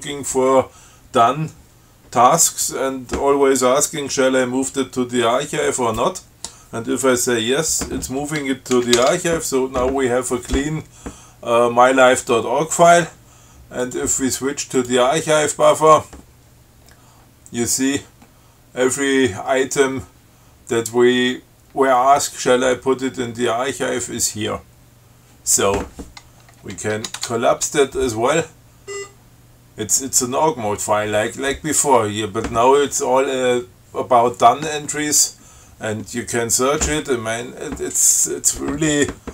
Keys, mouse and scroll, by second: 9.0 ctrl+x, 9.2 ctrl+s, 14.1 click, 15.0 click, 17.1-17.4 scroll up 2, 17.6 scroll down 2, 18.4 scroll down 2, 26.2 scroll up 2, 27.2 shift+Tab, 29.1 scroll up 2.